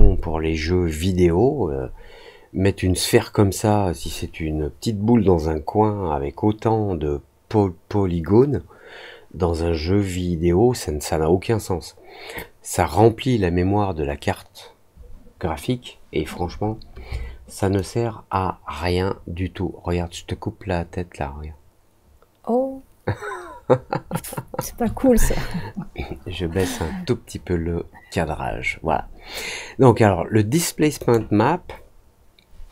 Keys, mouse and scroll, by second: 17.7-24.5 alt+drag, 30.9 click.